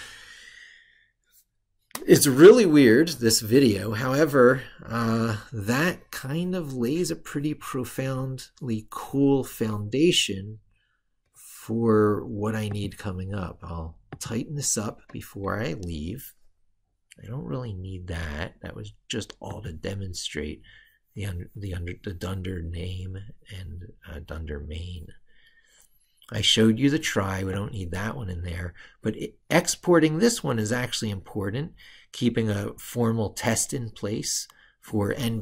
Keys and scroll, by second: 4.7 ctrl+super+Left.